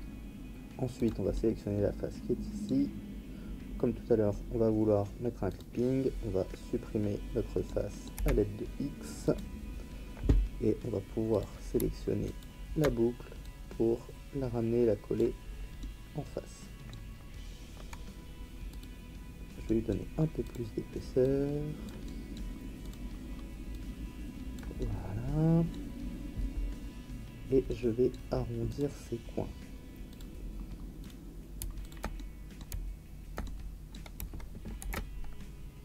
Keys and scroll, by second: 8.1 x, 34.8 ctrl+b.